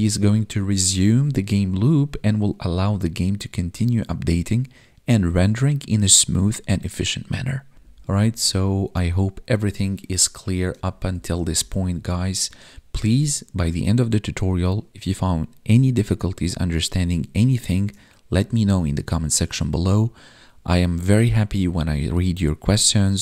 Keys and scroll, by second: 7.7 ctrl+Down, 10.9 ctrl+Up.